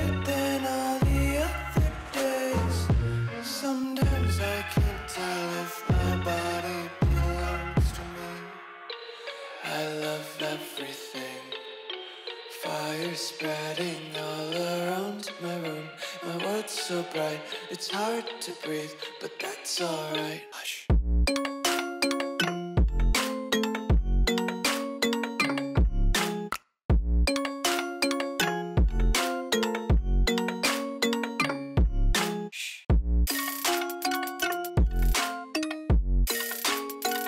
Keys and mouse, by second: 0.4 Tab, 0.8 KP_1, 1.9 shift+a, 3.8 click, 3.9-9.7 typing, 10.7 z, 10.8 z, 11.0 z, 11.0-11.8 s, 13.0 g, 15.4 click, 16.0 s, 17.3 g, 18.6 click, 19.0 z, 19.7 z, 20.1 click, 20.8-21.1 middle drag, 22.3 ctrl+f, 22.6 middle click, 22.7 Tab, 23.0 3, 23.1 click, 23.5 middle click, 23.9 Tab, 24.2 ctrl+a, 24.6 Tab, 24.7 middle click, 25.1 middle click, 25.6 shift+click, 26.5 ctrl+b, 28.0 Tab, 28.2 click, 28.5 Tab, 28.8 3, 28.9 click, 29.3 x, 29.8 Tab, 29.9 middle click, 30.4 click, 31.2 KP_1, 31.8 Tab, 32.1 ctrl+r, 34.8 shift+click, 35.1 ctrl+b.